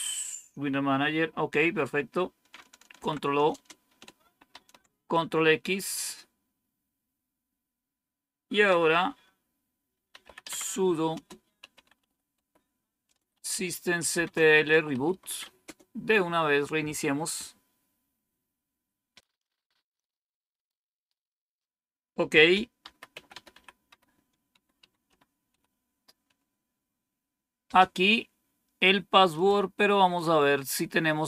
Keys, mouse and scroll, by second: 1.5 Up, 2.9 ctrl+o, 3.4 Return, 4.4 ctrl+x, 9.8-15.8 typing, 22.5-25.8 typing, 29.2 click.